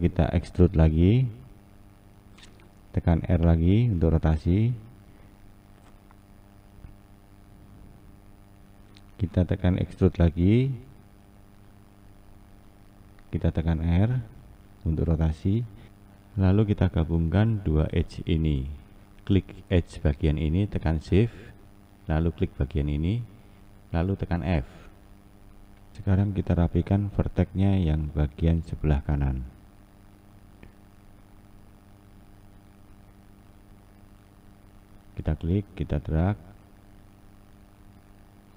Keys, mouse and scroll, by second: 0.5 e, 3.2 r, 5.8 s, 7.4 click, 9.2 e, 13.9 r, 19.2 click, 19.7 click, 22.0 shift+click, 23.9 f, 25.9 1, 28.4 Left, 30.5 Left, 34.7 shift+Left.